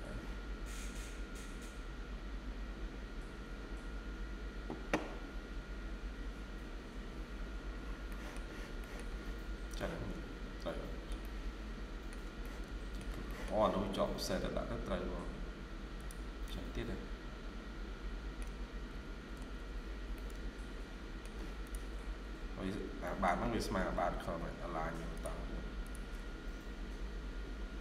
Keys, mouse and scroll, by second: 4.4 scroll down 1, 7.7-8.5 scroll down 2, 8.0 middle click, 8.7 middle click, 8.9-9.4 scroll down 2, 9.0 Escape, 9.6 middle click, 11.1 shift+middle click, 12.3 shift+middle click, 13.1 middle click, 13.6-13.9 scroll up 1, 16.3 middle click, 19.2 typing, 19.7 scroll down 1, 20.0 middle click, 21.8-22.3 scroll up 1, 22.9 middle click, 23.6-24.1 typing.